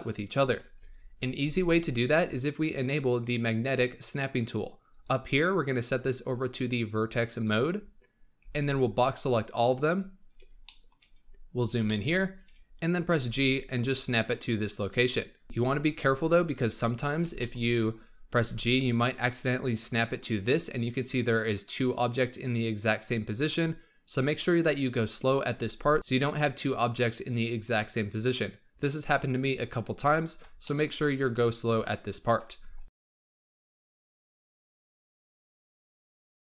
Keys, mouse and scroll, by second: 1.4 alt+a, 4.8 click, 5.6-8.3 drag, 8.3 b, 10.6 shift+middle click, 11.0-11.8 scroll up 7, 11.8 shift+middle drag, 12.1-13.2 scroll up 4, 13.2 g, 17.2 b, 18.3 g, 30.5-32.0 shift+middle drag, 32.0-32.8 scroll down 1, 32.8 scroll down 1, 33.0 scroll up 1, 33.2-36.4 typing, 34.5 shift+middle click, 35.4 shift+middle click, 35.7 shift+middle drag, 36.1 shift+middle drag, 36.2 shift+middle click.